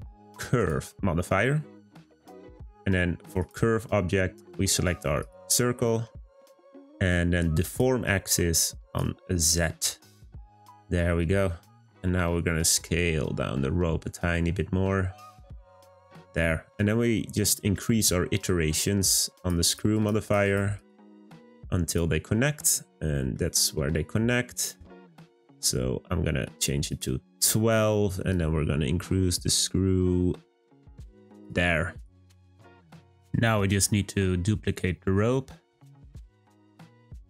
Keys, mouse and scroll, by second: 1.2-3.3 middle drag, 3.3 click, 5.9-6.3 middle drag, 6.3-7.6 scroll up 1, 7.6-9.8 drag, 9.8-10.1 scroll down 2, 10.1-12.0 middle drag, 12.0 s, 16.2-18.9 middle drag, 18.9-22.4 drag, 22.4-23.4 middle drag, 23.4-24.4 scroll up 4, 24.4-26.8 middle drag, 26.8-31.4 drag, 32.0 click, 32.2 scroll down 2, 32.8 middle click, 33.3-33.7 scroll down 2, 34.2 click.